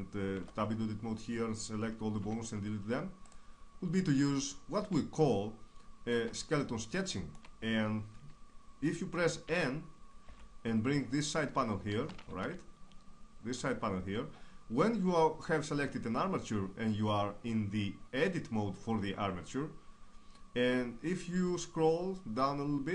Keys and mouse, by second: 0.6 Tab, 2.3 x, 5.4 click, 5.8-9.5 middle drag, 9.5 n, 10.3 n, 12.4 shift+space, 21.7-22.9 middle drag.